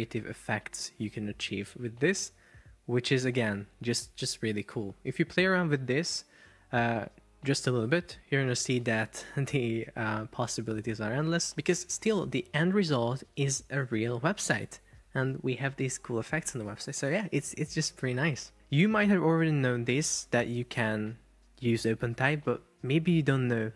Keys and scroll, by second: 14.7 shift+super+4, 15.3 Escape.